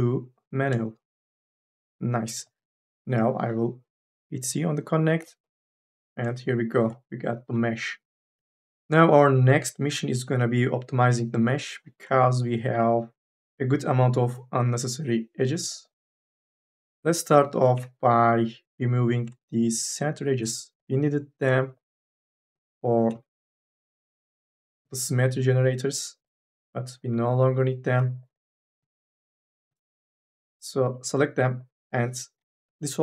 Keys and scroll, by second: 5.0 c, 7.3 3, 9.7 2, 10.0 e, 29.8 ctrl+z, 32.2 m, 32.5 n.